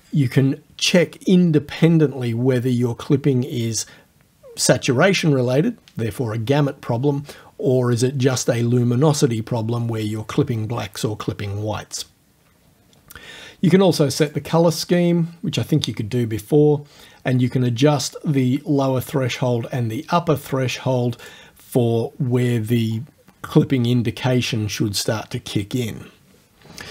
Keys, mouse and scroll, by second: 14.2 click, 14.5-18.6 middle drag, 21.2 click, 21.5-23.5 middle drag.